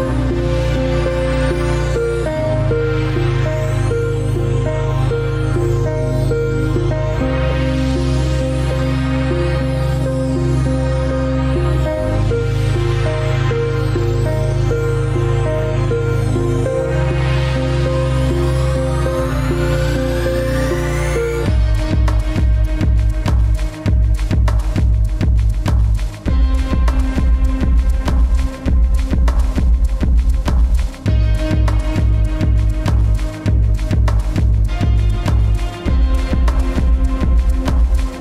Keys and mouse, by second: 0.0-0.4 drag, 0.9 shift+click, 1.7 shift+click, 4.8-5.7 right drag, 6.1 ctrl+z, 6.7-7.2 middle drag, 7.2 ctrl+z, 7.6 ctrl+z, 7.8 ctrl+z, 8.9-11.9 ctrl+z, 13.5 ctrl+r, 17.5 ctrl+r, 21.1-21.8 middle drag, 23.4 ctrl+shift+z, 23.9-25.2 ctrl+shift+z, 26.6-30.7 middle drag, 31.4 ctrl+r, 36.4-37.8 middle drag.